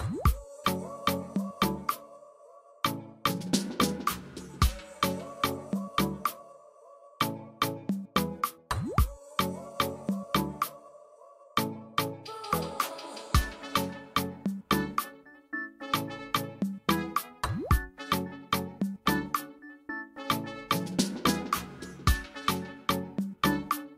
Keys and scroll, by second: 9.0-9.8 typing, 22.7 Delete.